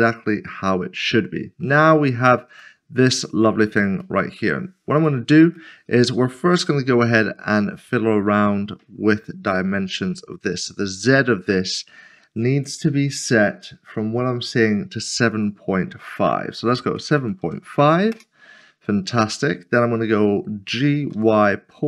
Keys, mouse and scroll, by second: 1.9 shift+middle click, 3.5 scroll up 1, 4.2 shift+middle click, 5.0 shift+middle click, 5.1 click, 5.5 middle click, 7.1 shift+middle click, 10.5 click, 16.9-17.4 typing, 18.1 Return, 20.7-21.1 typing.